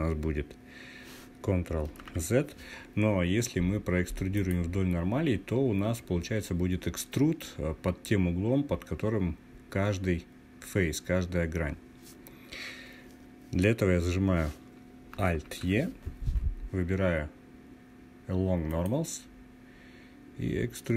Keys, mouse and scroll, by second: 1.5 ctrl+z, 3.9 click, 14.9 alt+e.